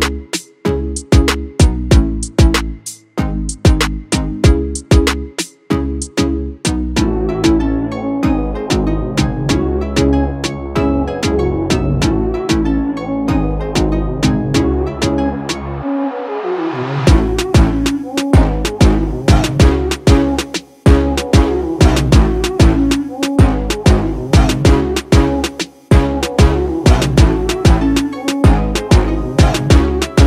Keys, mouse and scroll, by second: 2.4 ctrl+space, 2.6 ctrl+click, 2.8 ctrl+space, 3.6-8.6 drag, 8.6 click, 9.6 right click, 11.2 click, 13.2 ctrl+space, 13.4 ctrl+click, 19.5 alt+scroll down 1, 19.9 space, 20.0 click, 20.4 space, 20.7 ctrl+click, 24.9 space, 25.3 click.